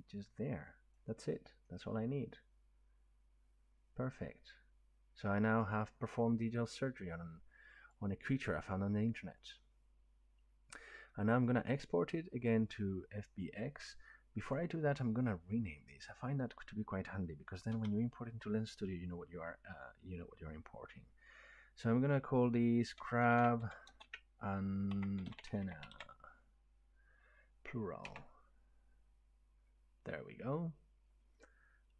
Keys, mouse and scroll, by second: 0.9-1.2 drag, 5.2 middle click, 7.9 click, 14.5 click, 16.0 click, 17.7 F2, 22.9-25.6 typing, 28.1 Return.